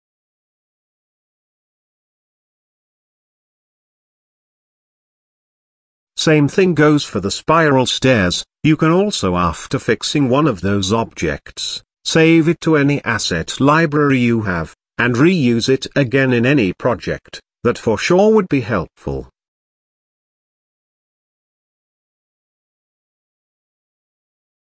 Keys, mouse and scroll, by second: 3.9-4.2 scroll down 4, 4.2 middle click, 5.1 j, 7.5 g, 8.4-9.4 middle drag, 9.4-9.7 scroll up 4, 9.7-10.6 shift+middle drag, 10.6-11.3 scroll up 4, 11.3-13.5 drag, 14.5-16.2 drag, 16.3 scroll down 1, 16.4-17.2 middle drag, 17.2-18.1 scroll up 1, 19.2-19.8 scroll down 2, 19.8-20.7 shift+middle drag, 20.7-21.2 scroll down 2, 21.2 click, 22.3-23.3 shift+middle drag, 23.3 j.